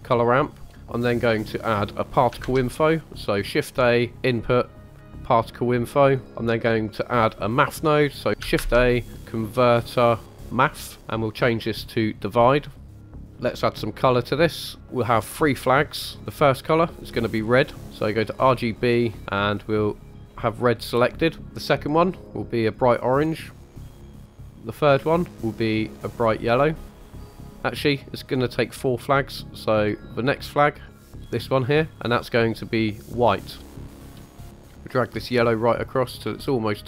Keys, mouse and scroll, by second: 0.7 middle click, 2.4 shift+a, 8.6 shift+a, 12.1-13.3 drag, 13.3 middle click, 14.1-14.8 scroll up 2, 15.3 click, 16.4 click, 17.0 click, 17.6 click, 21.6 click, 22.6 click, 24.9 click, 25.6 click, 28.3-29.2 drag, 29.8 click, 30.8-31.2 drag, 31.9-33.9 drag, 34.1-36.8 drag.